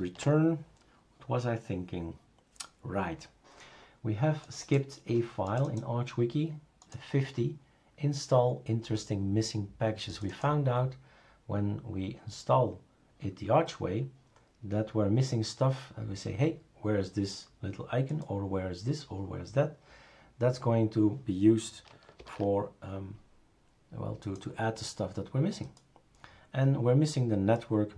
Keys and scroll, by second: 22.2 super+f.